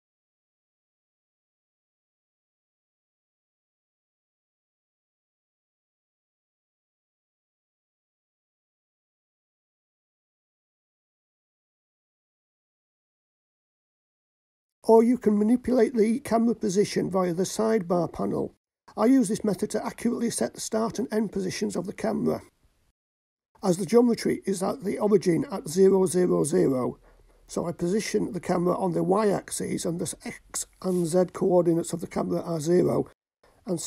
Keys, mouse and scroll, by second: 0.4 click, 1.5 r, 3.2 drag, 3.8-4.6 scroll up 6, 7.9 g, 13.8 shift+click, 16.0 ctrl+alt+KP_0, 18.6 click, 21.1 click, 24.1 click, 25.8-27.1 drag, 29.0-30.3 drag, 32.4-33.8 drag.